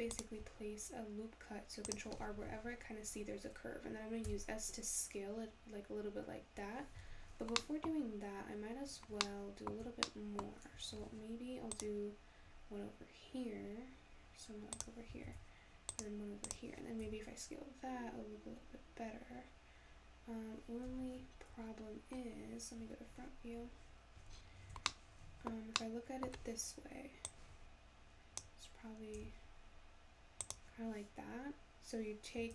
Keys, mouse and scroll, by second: 4.2 s, 7.6 middle click, 8.0-9.2 scroll up 1, 9.2-11.0 shift+middle drag, 11.0 ctrl+r, 15.3 ctrl+r, 17.0 s, 21.4-21.7 scroll up 1, 21.7-22.9 scroll down 4, 22.9 `, 24.4-24.9 scroll up 6, 24.9-27.3 shift+middle drag, 27.3 click, 29.2 s.